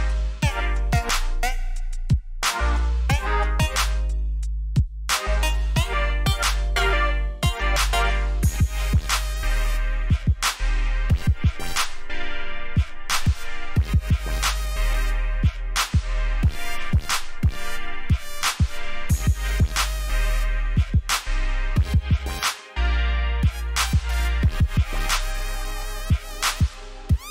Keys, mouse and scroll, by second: 17.3-17.8 alt+scroll down 1, 17.8-18.4 alt+scroll up 1, 18.9-19.2 alt+scroll down 1, 19.8-20.2 scroll up 1, 20.2 click, 21.2 ctrl+alt+shift+e, 22.4-23.2 alt+scroll down 2, 23.2 click, 24.2 j, 24.7-25.2 alt+scroll down 1, 26.0-26.7 scroll down 1, 26.7-27.3 scroll up 1.